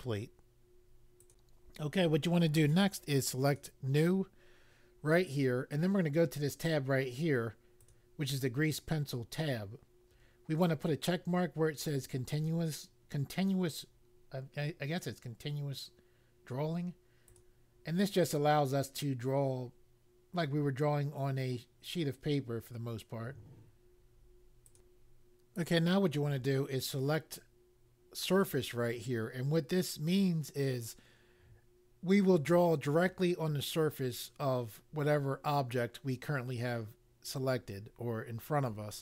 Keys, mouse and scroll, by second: 1.2 click, 3.4 click, 7.8 click, 17.3 click, 24.6 click, 28.3 click.